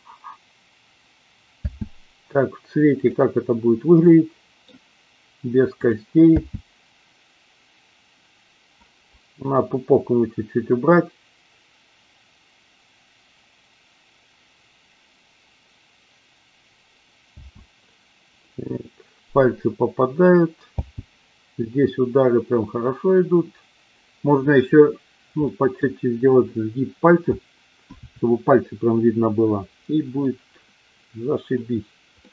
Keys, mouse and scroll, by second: 1.6 space, 3.3 click, 4.0-4.5 middle drag, 6.3 space, 17.4 space, 20.7 space, 25.4-25.7 middle drag, 32.2-32.3 middle drag.